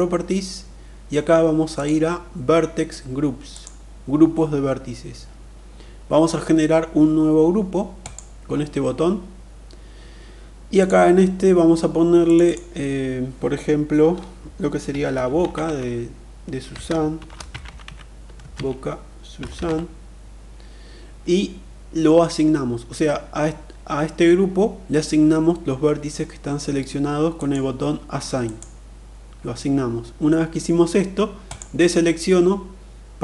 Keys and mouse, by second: 1.2 click, 2.9 click, 7.4 click, 10.2 click, 11.7 click, 12.0-27.0 drag, 17.3 z, 19.0 n, 28.0 click, 31.0 click.